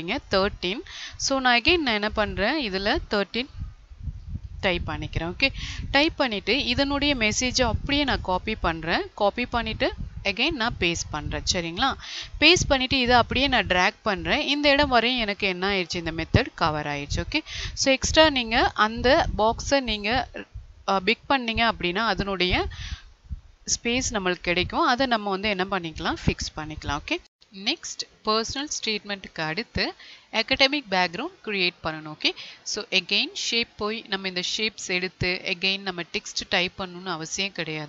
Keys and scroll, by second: 9.1 ctrl+c, 10.5 ctrl+a, 12.0 ctrl+v.